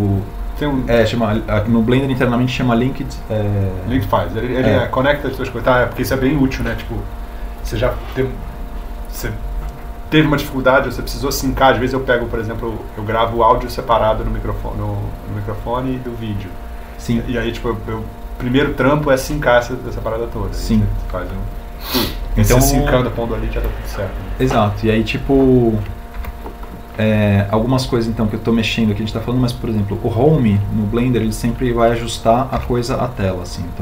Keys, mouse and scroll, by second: 33.3 Home.